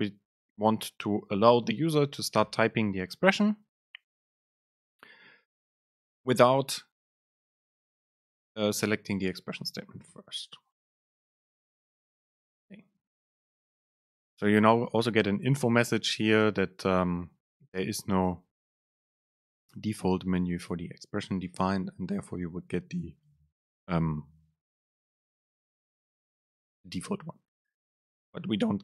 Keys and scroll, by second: 10.2 Down.